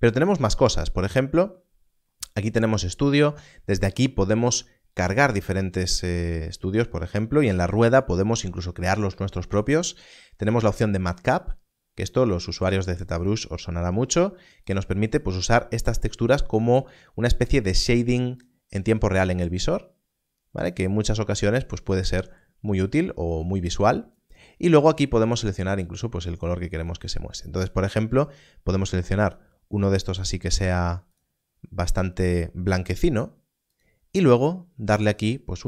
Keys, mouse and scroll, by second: 5.1 click, 11.1 click, 16.3 click, 23.2 click, 33.6 click.